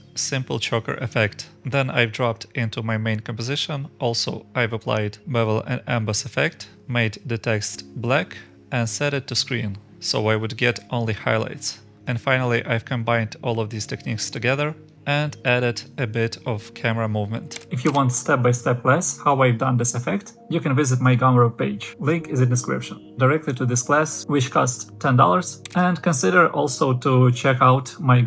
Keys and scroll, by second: 3.6-4.6 scroll down 1, 4.6 scroll up 1, 6.6-7.5 scroll down 1, 8.1-8.4 scroll up 1.